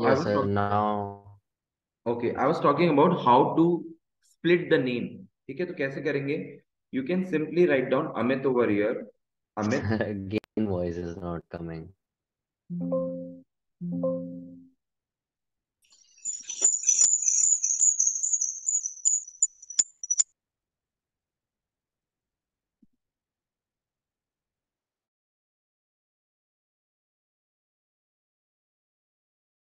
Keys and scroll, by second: 7.0 shift+a, 7.7 BackSpace, 8.2 Caps_Lock, 8.5 BackSpace, 10.2 Tab, 15.0 Escape.